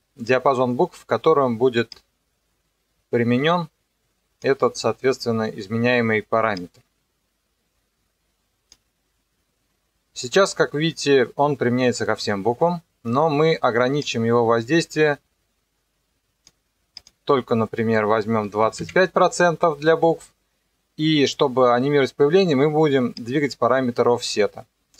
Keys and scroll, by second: 18.4 KP_2, 18.6 KP_5, 18.8 Return.